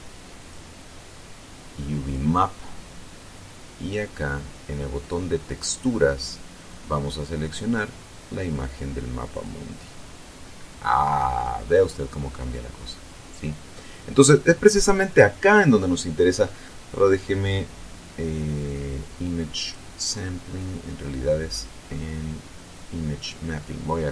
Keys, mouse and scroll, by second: 0.8 click, 2.5 click, 5.5 click, 8.1 click, 9.7 click, 12.1-14.3 drag, 16.8-17.4 scroll down 1, 20.0 click, 20.6-21.2 scroll down 4, 24.0 click.